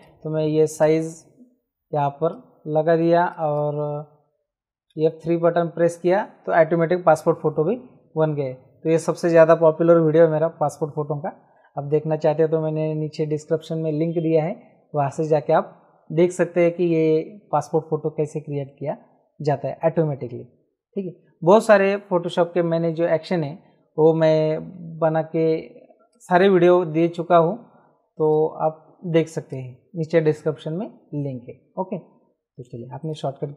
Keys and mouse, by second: 2.3 click, 4.8 F3, 24.7 F9, 26.1 click, 28.2 click, 29.5 click, 33.0 click.